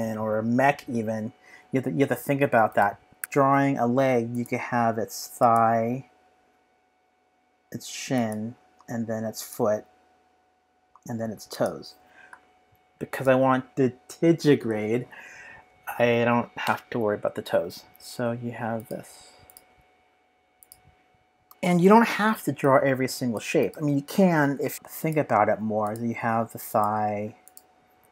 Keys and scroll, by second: 3.2 Return, 3.2 BackSpace, 3.2 p, 28.0 p.